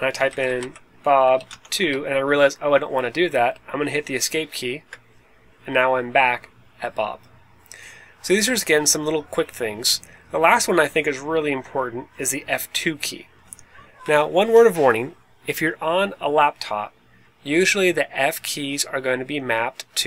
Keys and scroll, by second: 0.0-1.7 typing, 3.5-4.2 typing, 4.6 Escape.